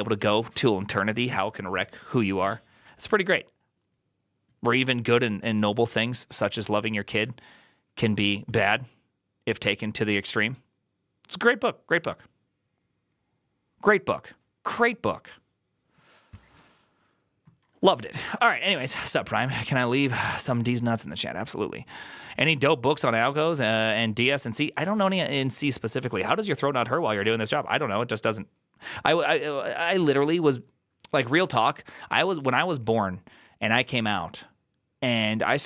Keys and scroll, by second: 18.0 alt+{.